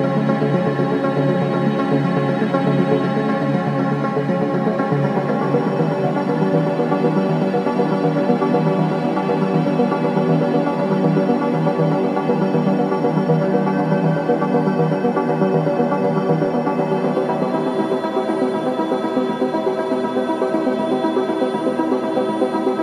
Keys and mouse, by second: 0.6 Tab, 3.5 click, 4.7-5.6 drag, 6.3-7.1 ctrl+alt+drag, 6.9 alt+middle click, 7.1 alt+middle click, 7.2-10.8 alt+drag, 11.2 click, 11.9 alt+click, 13.5 click, 15.9 click, 16.7-18.9 alt+drag, 19.4 click, 20.6-22.8 drag.